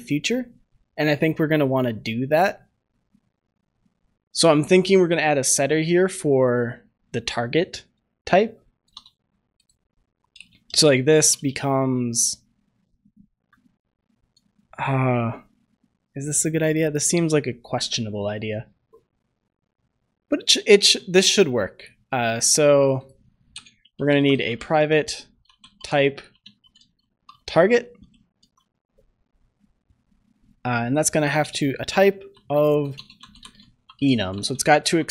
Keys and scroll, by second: 28.4 ctrl+s, 34.8 ctrl+s.